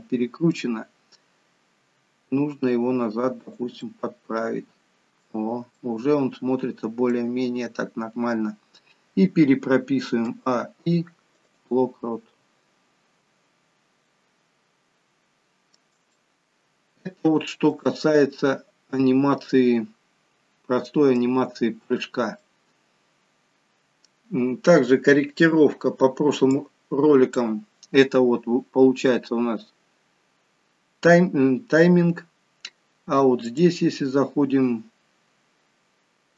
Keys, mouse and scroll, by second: 1.9 r, 3.9 middle click, 5.8 middle click, 10.3 a, 12.1-12.8 scroll down 2, 13.3-14.0 scroll down 1, 14.0 middle click, 16.2 shift+middle click, 18.1 middle click, 21.6-22.1 scroll up 1, 22.5 middle click, 26.5 click, 29.0 scroll down 1, 34.6 click.